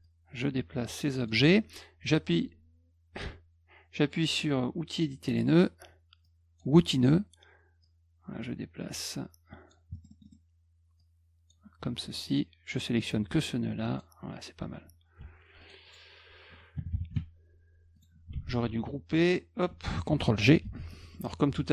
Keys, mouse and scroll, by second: 0.0-1.3 drag, 5.3 click, 6.2 click, 7.8-9.7 drag, 9.9-10.3 scroll up 3, 11.0 click, 12.0 click, 13.0 click, 15.2 F1, 15.6 click, 15.9 click, 17.9 click, 18.4 shift+click, 19.3 shift+click, 20.6 ctrl+g, 20.9 middle click.